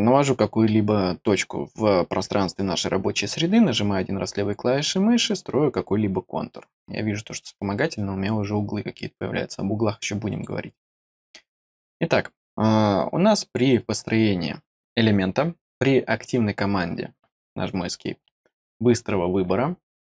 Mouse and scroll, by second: 3.6 click, 10.2 click.